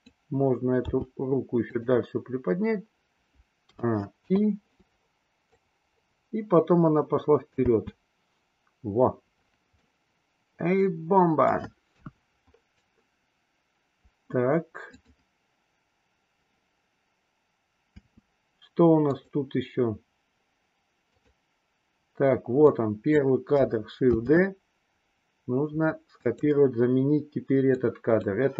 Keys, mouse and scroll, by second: 0.9 g, 3.6 a, 4.2 i, 5.5-7.6 drag, 7.6 space, 9.9-11.6 middle drag, 12.0 KP_1, 15.0 click, 17.8 space, 19.0 click, 21.1 click, 22.5-23.1 drag, 24.1 shift+d, 27.6 click.